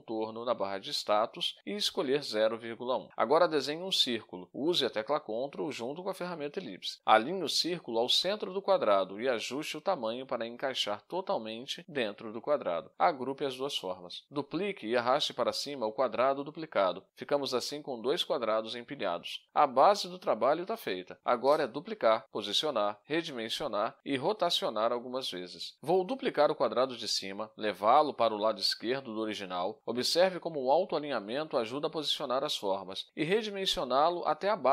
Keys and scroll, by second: 3.7 space, 5.7 ctrl+shift+a, 18.0 ctrl+g, 19.8 ctrl+d, 27.5 ctrl+d.